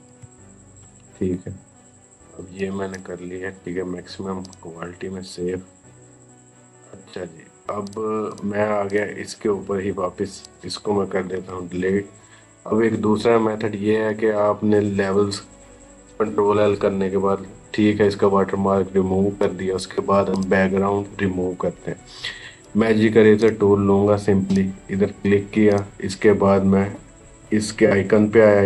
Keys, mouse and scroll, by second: 0.0-0.4 typing, 0.6 Return, 2.4-4.3 drag, 7.7 click, 19.2 click, 19.2 right click, 20.2 click, 22.4 right click, 23.2 click.